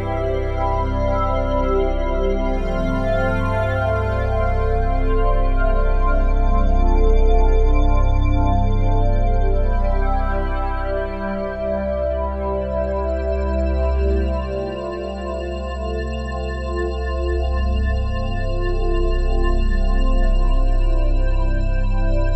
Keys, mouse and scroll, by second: 2.4-14.5 drag, 15.8 g, 18.3-19.4 drag.